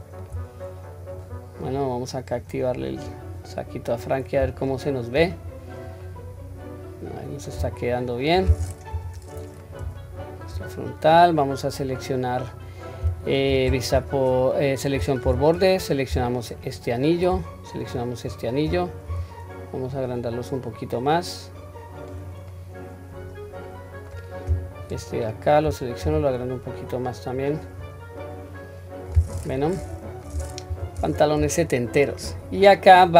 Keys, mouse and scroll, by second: 0.5 scroll down 1, 1.0-1.3 scroll up 1, 1.7-2.7 scroll down 2, 3.1 click, 4.1 scroll down 1, 4.7-5.2 shift+middle drag, 5.5-6.0 scroll up 3, 6.0-7.6 middle drag, 7.8-8.3 shift+middle drag, 8.9 KP_1, 9.3-9.8 scroll up 1, 10.0-10.4 shift+middle drag, 10.7-12.1 scroll up 1, 12.1 scroll up 1, 16.6 alt+click, 17.8 alt+shift+click, 19.1 s, 22.5-24.1 middle drag, 24.8 alt+click, 26.1 s, 27.8-29.1 scroll down 2, 28.2-29.1 middle drag, 30.0-30.7 scroll up 1, 30.7 KP_1, 31.6 shift+middle click, 32.6-33.1 scroll down 2.